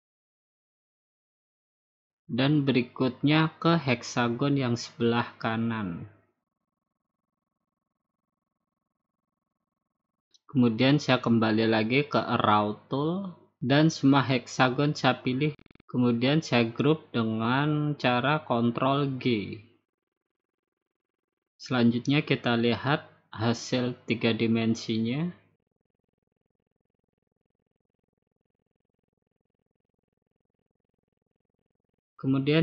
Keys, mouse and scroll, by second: 0.6 click, 0.8 ctrl+shift+d, 1.1 click, 1.6-2.0 scroll down 5, 2.1-2.7 scroll up 3, 2.5 ctrl+shift+d, 3.0 click, 3.5 click, 3.7 ctrl+shift+d, 4.1 click, 4.3 click, 4.3 click, 4.6 ctrl+shift+d, 4.9 click, 5.1 click, 5.4 click, 5.6 ctrl+shift+d, 5.8 click, 6.4 click, 6.4 ctrl+shift+d, 7.8 click, 8.7 click, 9.7-10.8 drag, 10.4 ctrl+shift+d, 11.1 click, 11.4 click, 11.9 ctrl+shift+d, 12.4 click, 13.0 click, 13.3 middle click, 13.8 shift+click, 14.1 shift+click, 14.4 shift+click, 14.6 shift+click, 14.8 shift+click, 14.9 shift+click, 15.3 shift+click, 15.5 shift+click, 15.7 shift+click, 15.9 shift+click, 16.0 shift+click, 16.4 shift+click, 16.6 shift+click, 16.8 shift+click, 17.0 shift+click, 17.3 shift+click, 17.5 shift+click, 17.7 shift+click, 17.9 shift+click, 18.2 shift+click, 18.6 ctrl+g, 22.5 click, 23.4-24.0 scroll down 2, 24.0-24.6 scroll down 2, 25.0 click, 26.3-27.1 scroll down 7, 27.7 click, 28.1 scroll up 3, 28.3 middle click, 29.0 middle click, 29.1 middle click, 30.3 click, 30.6 middle click, 30.8 middle click, 32.3 click.